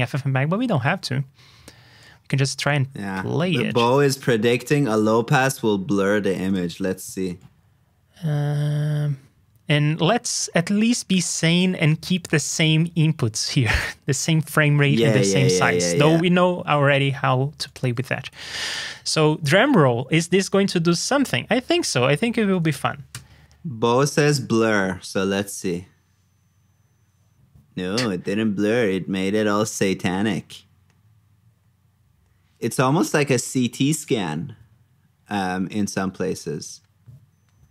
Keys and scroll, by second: 18.3 super+c, 18.9 super+v.